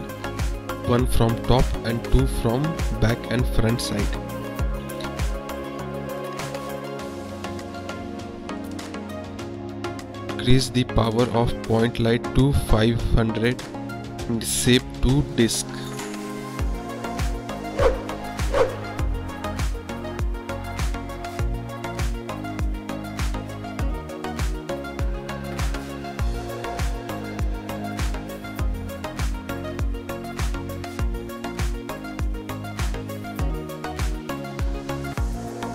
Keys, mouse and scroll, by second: 4.9 drag, 6.3-8.1 drag, 11.0 click, 11.6 KP_0, 13.3-13.9 drag, 14.4 middle drag, 15.6 click, 16.2 click, 21.4 click, 26.7 drag, 30.5 click, 31.8 KP_0, 32.7 click.